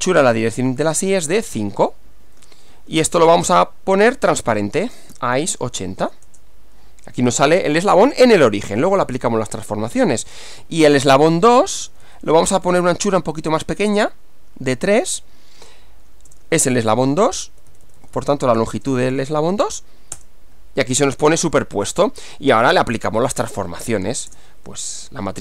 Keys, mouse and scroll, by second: 0.0-1.4 typing, 2.8 shift+9, 3.1 ., 4.3-6.3 typing, 9.6 click, 10.4 Up, 10.6 Left, 11.8 Left, 12.5 BackSpace, 14.5 3, 14.8 Left, 15.6 Left, 16.3 BackSpace, 16.4 2, 16.8 Left, 18.8 BackSpace, 18.8 2, 20.2 Return, 21.6-22.6 middle drag, 23.2 click, 24.3 Return, 24.9-25.4 typing.